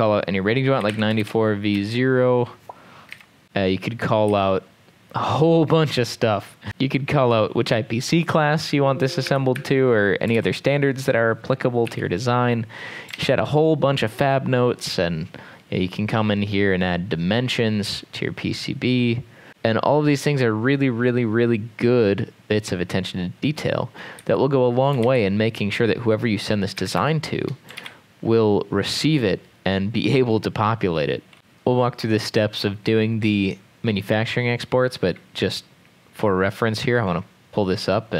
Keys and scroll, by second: 1.2-2.0 typing, 3.1 typing, 4.3 e, 9.5 Escape, 9.6 Escape, 10.9 ctrl+Page_Down, 12.2 m, 13.2 ctrl+s, 24.3 Escape, 25.1 ctrl+s, 26.8 Escape, 27.1 Escape, 27.8 ctrl+s, 31.3 alt+3.